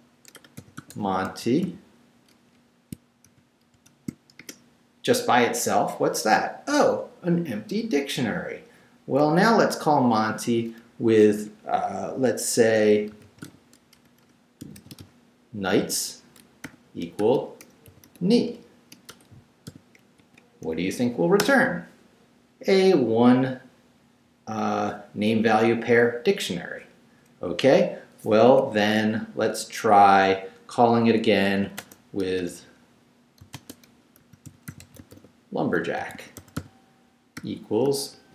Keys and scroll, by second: 0.0-2.1 typing, 3.3 shift+9, 3.7 shift+0, 4.4 shift+Return, 5.2 Return, 9.4 Up, 9.9 Left, 12.9-15.5 typing, 16.6-20.2 typing, 21.4 shift+Return, 28.5 Up, 30.0 Left, 32.2 BackSpace, 33.4-38.1 typing.